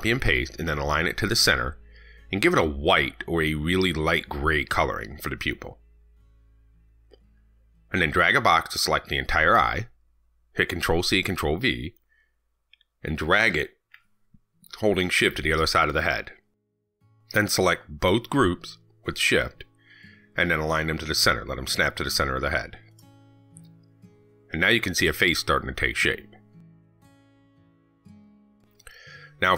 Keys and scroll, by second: 11.0 ctrl+c, 11.2 ctrl+v.